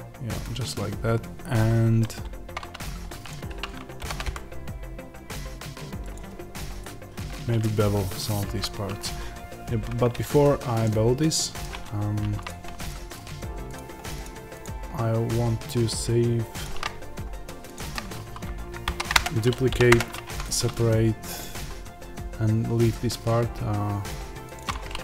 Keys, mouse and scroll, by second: 2.1-2.6 scroll, 3.1 click, 3.9 ctrl+b, 6.0 click, 7.5-12.3 middle drag, 8.3 ctrl+z, 12.3 click, 12.7 shift+click, 16.7-17.6 scroll down 1, 17.6 shift+click, 18.7 shift+d, 19.0 click, 19.1 Return, 19.8 p, 20.1 Tab, 21.2 click.